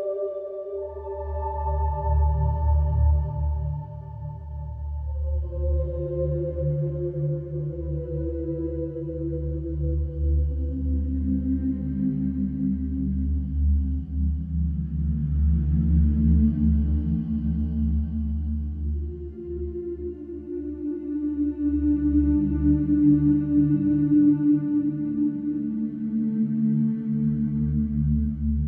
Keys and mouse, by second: 0.0 b, 0.4 Return, 12.1 shift+middle drag, 12.9 middle drag, 13.4 middle click, 14.0 Tab, 14.5 e, 16.9 Delete, 18.5 Tab, 21.6 middle click, 25.3-25.6 middle drag, 26.8 shift+a.